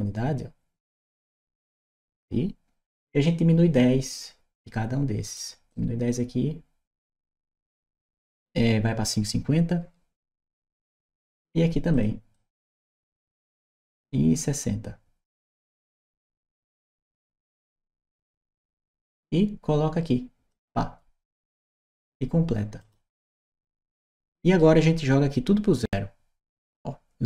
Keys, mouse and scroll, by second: 5.1 click, 5.5-6.8 drag, 11.7 click, 12.1-16.1 drag, 18.1 click, 20.3 click, 22.6 click, 23.2-24.4 right drag, 25.6 click.